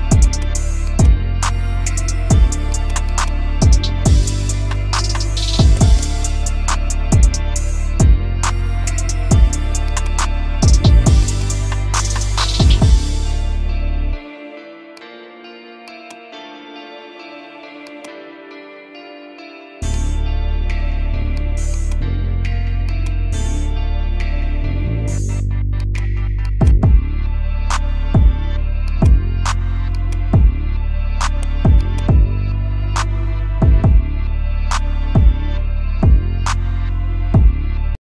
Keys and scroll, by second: 5.4 ctrl+g, 13.8 F2, 16.6 F4, 18.7 b, 19.2 Escape, 27.4 F3, 33.3 shift+F2, 34.5 F9, 37.2 F3.